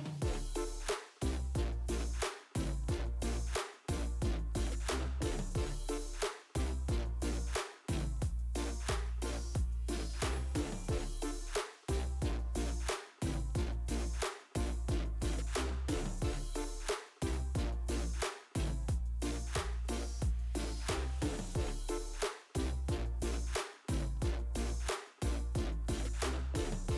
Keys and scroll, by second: 1.7 ctrl+0.